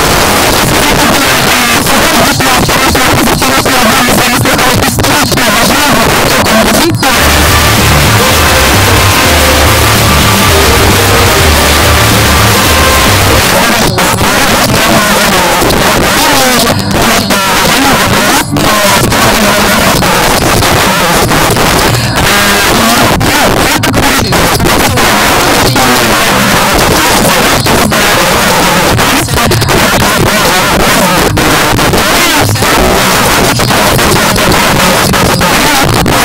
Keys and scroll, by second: 0.9 f, 1.1 Up, 1.3 Up, 1.5 Up, 1.6 Up, 1.9 Up, 1.9 Return, 13.5 Page_Down.